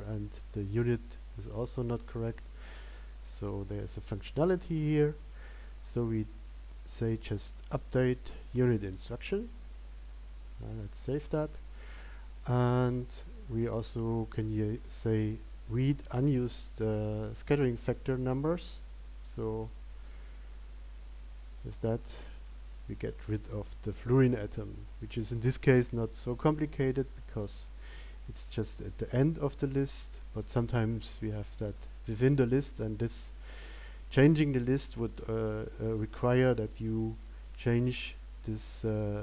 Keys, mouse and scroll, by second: 11.2 click.